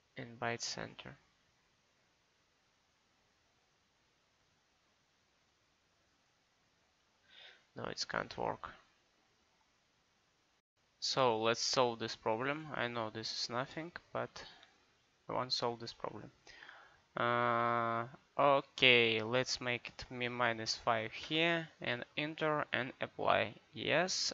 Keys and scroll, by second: 7.4 Escape, 20.3 KP_Subtract, 20.6 5, 21.3 Return.